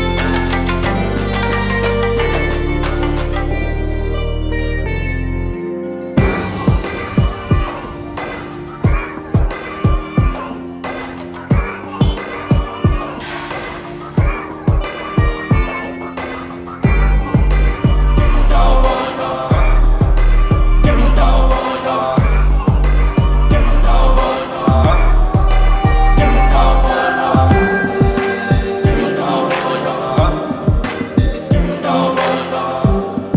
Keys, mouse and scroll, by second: 0.6 alt+click, 1.4 alt+middle click, 1.7 alt+click, 3.0 alt+click, 3.4 scroll down 1, 6.0-6.6 scroll up 3, 7.9-9.3 drag, 10.1 alt+click, 10.6 alt+middle click, 11.3-11.8 scroll down 2, 13.0-16.2 drag, 17.4 right click, 18.8 click, 20.0 right click, 21.4 click, 22.4 click, 23.8 click, 25.6 alt+click, 26.2 scroll down 2, 26.4 alt+click, 27.0 alt+middle click, 27.3 scroll down 2, 27.5 alt+click, 28.0-28.7 shift+right drag, 29.0 alt+click, 29.3 alt+middle click, 29.7 scroll up 1, 30.0 alt+middle click, 32.2 click.